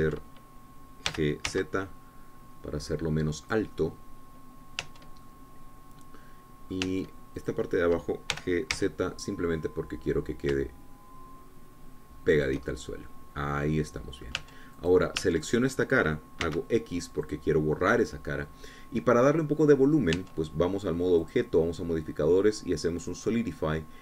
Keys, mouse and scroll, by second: 1.5 Tab, 2.6 g, 3.1 z, 5.0 click, 5.3-6.6 middle drag, 6.4 Tab, 6.8-8.5 drag, 8.4 Tab, 9.1 click, 9.9 g, 10.3 z, 13.9 shift+click, 14.3-16.3 shift+middle drag, 16.0 Tab, 16.3 click, 16.8 Tab, 17.0 click, 18.0 x, 18.8 click, 19.5-21.0 drag, 21.8 Tab, 22.8 click.